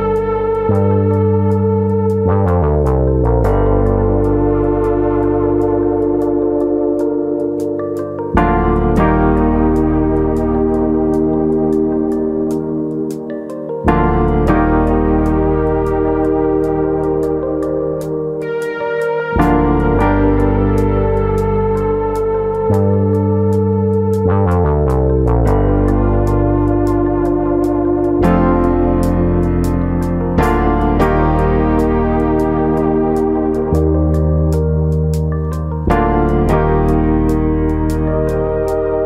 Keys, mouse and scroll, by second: 3.1 s, 4.0 click, 4.7 click, 5.5 middle click, 6.4 click, 7.7 middle click, 8.2 middle click, 9.0 click, 9.6 middle click, 10.4 KP_1, 11.2 middle click, 12.1 click, 12.4 l, 12.8 middle click, 13.5 click, 15.0 click, 15.7 middle click, 16.2 middle click, 16.8 click, 17.5 middle click, 17.8-18.4 scroll down 1, 18.4 scroll down 3, 18.5 middle click, 19.5 Tab, 19.8-20.1 scroll down 3, 20.1 middle click, 21.0 KP_1, 21.8 Tab, 22.4 a, 23.2 s, 26.3 click, 26.7 click, 30.5 click, 31.7 s, 32.4 click, 32.6 Tab, 32.8-33.4 scroll down 3, 33.0 click, 33.4 scroll up 3, 33.6 middle click, 35.2 scroll up 1, 35.6 click, 37.0 middle click, 37.3 scroll down 2, 37.5 middle click, 37.8 click, 38.1-38.5 scroll up 3, 38.5-39.0 scroll down 5, 38.9 shift+middle click.